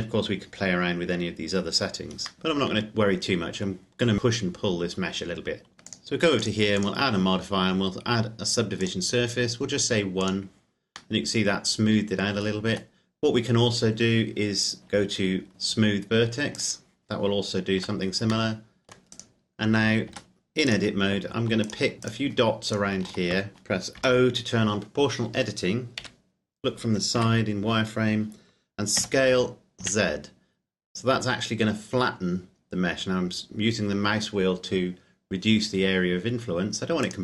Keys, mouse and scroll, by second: 2.3 middle click, 5.9 click, 11.1 middle click, 12.7 Tab, 16.6 click, 17.8 Tab, 18.5 middle click, 19.2 right click, 20.1 Tab, 20.7 right click, 21.7 shift+right click, 24.2 o, 26.2 KP_1, 27.4 z, 29.2 s, 30.0 z, 31.5-31.9 scroll up 1, 37.0 click.